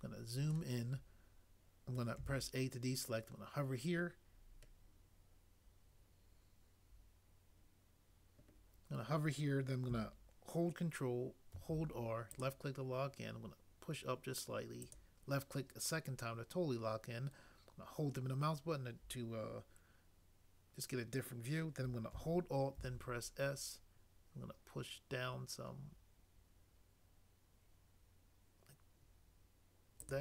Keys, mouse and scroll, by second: 2.2 a, 11.6 ctrl+r, 22.8 alt+s.